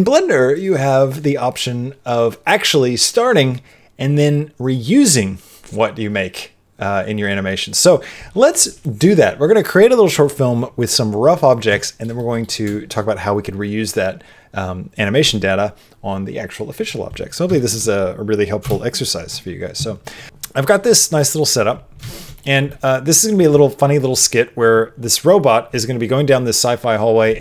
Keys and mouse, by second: 11.8 shift+middle click, 12.1 middle click, 17.5 shift+middle click, 18.6 KP_0, 21.1 middle click, 22.1 shift+middle click, 22.3 middle click, 22.7 middle click.